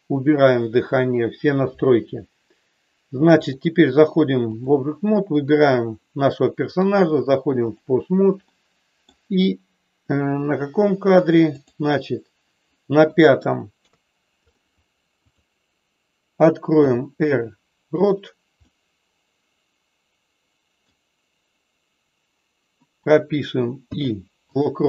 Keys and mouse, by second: 3.5-4.7 drag, 5.3 click, 6.7-7.8 drag, 8.5 middle click, 11.6 click, 13.1 middle click, 13.7 KP_3, 15.2 click, 16.7 r, 18.6-20.8 middle drag.